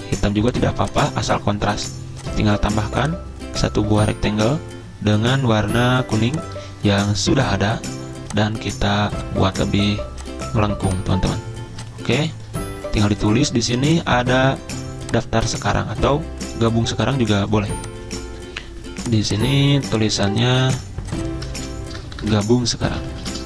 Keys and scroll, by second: 17.6 z, 21.6 ctrl+a, 21.9-23.4 typing.